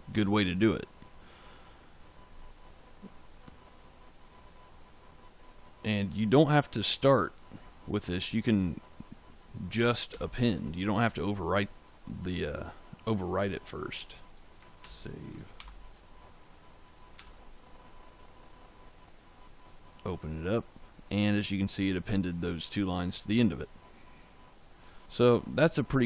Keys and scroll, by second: 10.0 shift+., 14.7 ctrl+s, 15.5 ctrl+shift+z, 17.1 f.